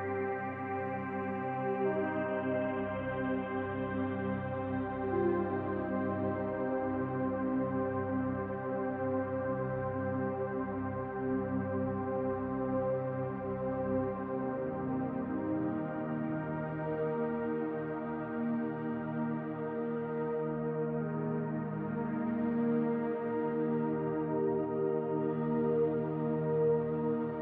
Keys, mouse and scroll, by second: 13.4 scroll down 2, 13.6-15.5 middle drag, 14.2 scroll up 2, 15.5-27.4 drag, 20.0 ctrl+z, 23.5 ctrl+z.